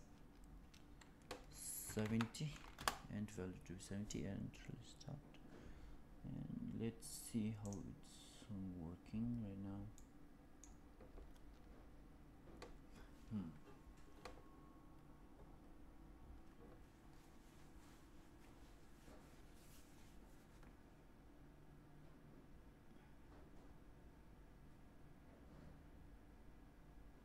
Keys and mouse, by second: 7.5 click, 10.6-11.3 middle drag.